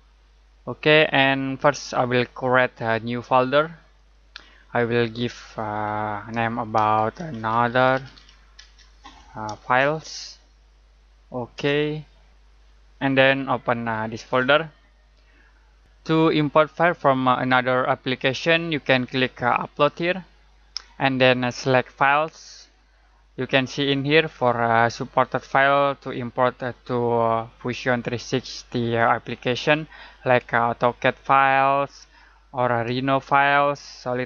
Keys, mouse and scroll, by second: 3.9 click, 6.7-10.6 typing, 11.5 Return, 14.0 Return, 14.0 click, 19.9 click.